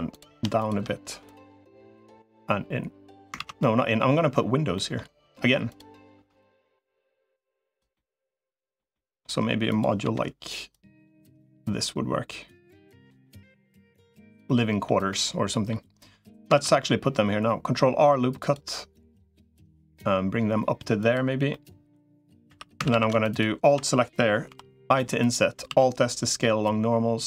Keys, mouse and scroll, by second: 0.4 click, 1.0 click, 2.2-3.2 drag, 3.2 ctrl+z, 3.4 middle click, 3.9 middle click, 4.5 middle click, 6.2-7.6 drag, 7.7 middle click, 8.7 middle click, 9.8 l, 10.6-13.0 drag, 13.0 middle click, 14.2 middle click, 14.9 middle click, 16.4 ctrl+r, 21.3 middle click, 22.4 3, 22.6 a, 22.8 a, 24.4 i, 25.6 alt+s.